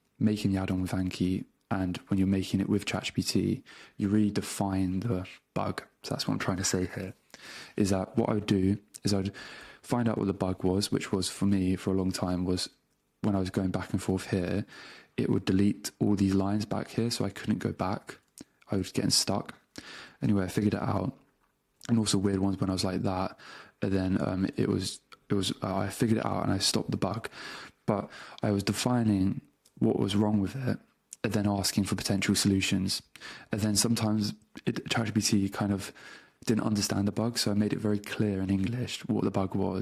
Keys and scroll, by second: 9.5 space, 11.5 space, 11.7 a, 12.1 Return, 12.9 BackSpace, 13.1 Return, 13.5 BackSpace, 13.9 Return, 14.3 BackSpace, 14.5 Return, 16.8 BackSpace, 18.2 Return, 19.3 BackSpace, 19.9 Return, 20.3 BackSpace, 21.8 Return, 23.0 alt+Down, 23.6 alt+Left, 24.0 BackSpace, 24.4 Return.